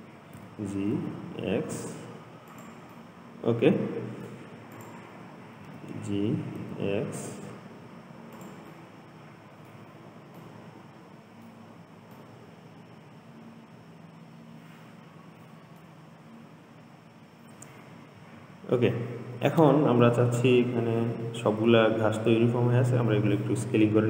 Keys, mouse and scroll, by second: 0.6 g, 3.1-5.0 middle drag, 5.0 click, 5.9 g, 9.0-10.2 middle drag, 10.2-10.6 scroll up 2, 10.6-11.9 middle drag, 11.9-12.4 scroll down 2, 12.4-15.6 middle drag, 16.9-18.1 scroll down 2, 18.1-19.0 scroll up 3.